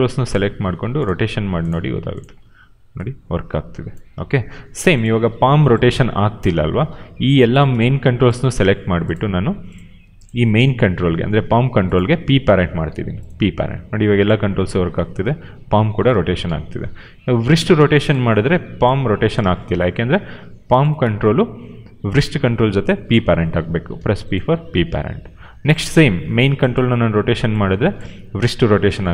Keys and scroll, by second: 2.3 e, 4.0 ctrl+z, 5.1 e, 6.4 ctrl+z, 6.8 q, 12.8 p, 13.5 e, 16.0 ctrl+z, 16.3 q, 18.2 e, 19.3 ctrl+z, 19.6 q, 23.9 p, 26.8 e, 27.9 ctrl+z, 28.4 q.